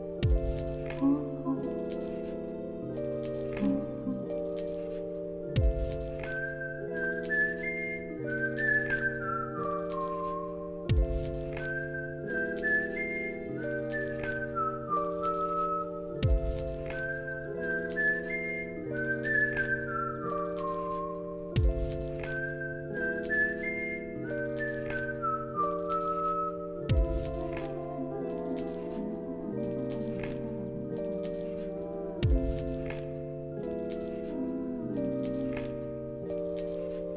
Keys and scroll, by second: 0.3 alt+z, 2.1 ctrl+c, 2.3 ctrl+v, 2.9 alt+x, 5.1 ctrl+c, 5.4 ctrl+v, 11.6 alt+x, 12.7 alt+], 14.9 alt+], 15.4 alt+x, 16.1 ctrl+s, 17.4 ctrl+a, 19.2 space.